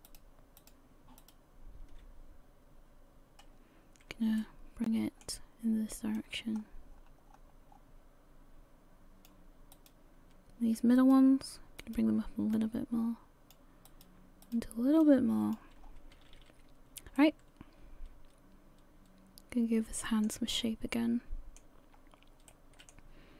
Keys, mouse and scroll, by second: 0.2 shift+right click, 4.4 middle click, 6.2 click, 9.7 right click, 11.0 shift+right click, 12.2 shift+right click, 12.5 click, 13.9 right click, 14.4 right click, 15.0 click, 15.8-16.2 scroll down 3, 16.2 a, 16.4 a, 17.2 middle click, 20.1 middle click, 20.5 middle click, 22.0-22.5 scroll up 1, 22.5 middle click.